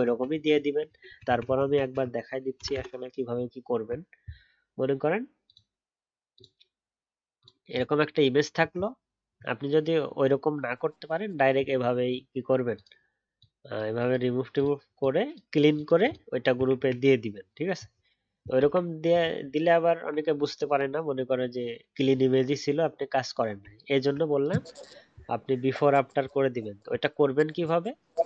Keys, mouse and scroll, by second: 0.0 ctrl+z, 0.3 ctrl+z, 0.5 ctrl+z, 0.6 ctrl+z, 1.0 ctrl+z, 1.2 ctrl+z, 1.6 ctrl+z, 1.8 ctrl+z, 19.3-19.6 alt+scroll down 1, 23.7-27.0 alt+scroll down 1.